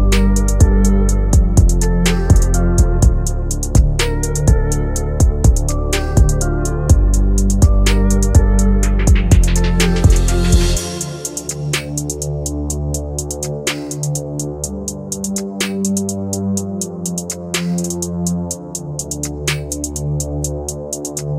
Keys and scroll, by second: 2.4 F3, 6.3 F3.